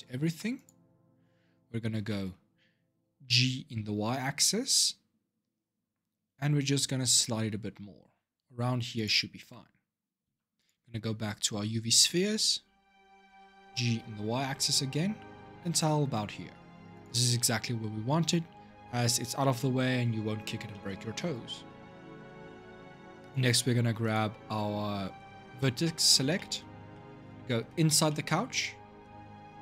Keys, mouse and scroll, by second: 0.3 click, 0.8-1.2 scroll up 4, 1.5 scroll down 2, 1.8-3.0 shift+middle drag, 3.0 g, 10.0 Tab, 10.3 click, 11.4 Tab, 13.1 g, 19.2 middle click, 20.0-20.5 scroll down 3, 20.5-23.0 shift+middle drag, 23.0 click, 24.2-25.6 scroll up 5, 25.6-27.6 middle drag, 27.6 scroll up 1, 27.8-29.6 middle drag.